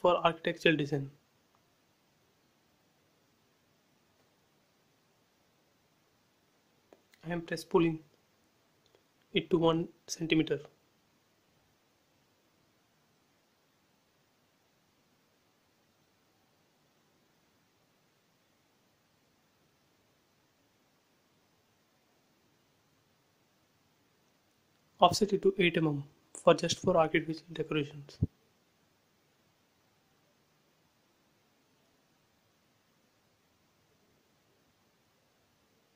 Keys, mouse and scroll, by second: 0.5 click, 1.4 f, 2.0 click, 3.1 2, 3.7 shift+', 3.9 Return, 4.2 space, 5.0 click, 6.5 Delete, 7.6 scroll up 1, 8.0-10.2 middle drag, 10.2 p, 10.7 click, 13.2 typing, 15.0 BackSpace, 16.1-17.4 typing, 17.0 Return, 18.5 scroll up 1, 18.7 shift+middle click, 18.8 shift+middle click, 20.0 click, 20.5 scroll up 1, 21.7 f, 22.3 space, 22.6 click, 23.5 f, 24.0 click, 25.2-26.5 typing, 26.2 Return, 29.7 click, 30.7 f, 31.1 click, 33.0-34.0 scroll up 1, 34.4 click, 34.5 space, 34.8 click, 35.2 middle click, 35.7-35.9 scroll down 2.